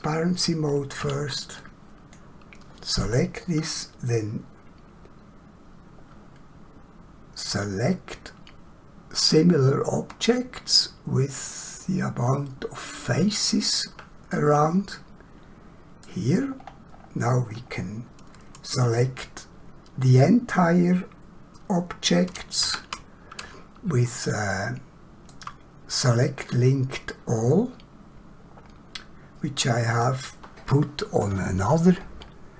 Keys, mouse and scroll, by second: 0.9 <, 1.6 click, 7.5 click, 13.1 click, 14.3 middle click, 16.6 middle click, 16.7 scroll down 1, 17.0-17.5 scroll up 1, 24.3 shift+middle click, 26.3 middle click.